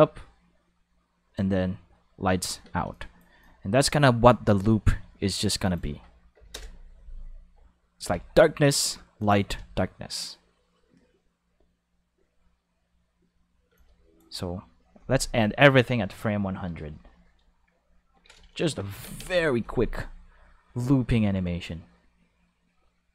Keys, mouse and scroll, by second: 2.6 space, 2.8 5, 2.9 click, 3.4 click, 6.3 5, 6.5 Return, 6.6 5, 8.0 5, 9.2 click, 9.4 space, 9.5 5, 13.7 space, 13.7 click, 13.8 5, 18.9 ctrl+5, 19.2 space.